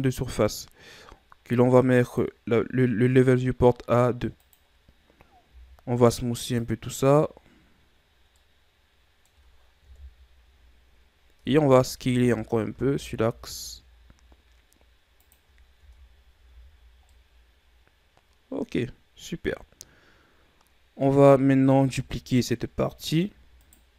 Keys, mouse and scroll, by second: 2.0-5.5 drag, 5.5 w, 8.4-9.9 middle drag, 9.9 KP_1, 11.4 Tab, 11.9 a, 12.2 a, 12.7 s, 15.8 Tab, 16.5 a, 16.8-17.1 scroll down 3, 17.1-20.1 middle drag, 21.9 KP_1, 23.0-23.6 scroll up 2, 23.6 right click.